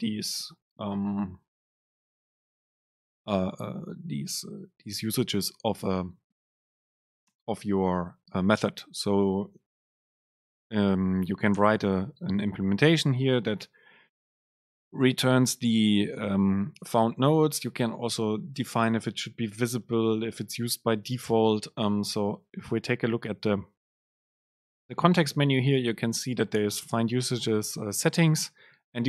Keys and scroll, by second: 28.6 ctrl+alt+shift+super+F7.